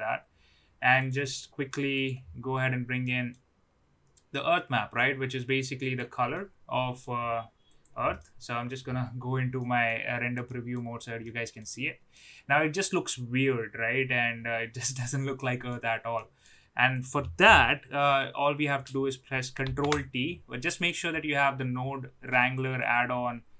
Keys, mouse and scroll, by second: 3.1 middle click, 5.0-6.0 drag, 6.3-7.0 middle drag, 7.7 click, 8.1-8.6 middle drag, 9.5 middle click, 10.4 middle drag, 11.2-11.6 middle drag, 12.1-15.6 middle drag, 16.2 middle click, 16.9 click, 19.6 ctrl+t, 20.6-22.6 drag.